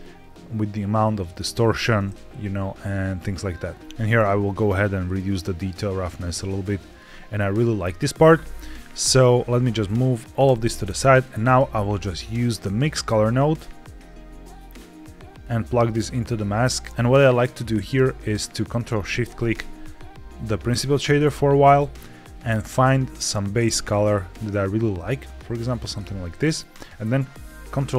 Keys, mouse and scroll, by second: 3.1 click, 3.8 ctrl+z, 3.8-4.6 scroll up 2, 4.7-6.9 drag, 7.3-7.7 scroll down 2, 8.6-9.1 scroll down 1, 9.1 click, 9.1-10.0 scroll down 2, 10.3 g, 11.6 shift+a, 15.3 click, 19.2 ctrl+shift+click, 20.6-21.6 scroll up 2, 21.6 click, 27.8 ctrl+c.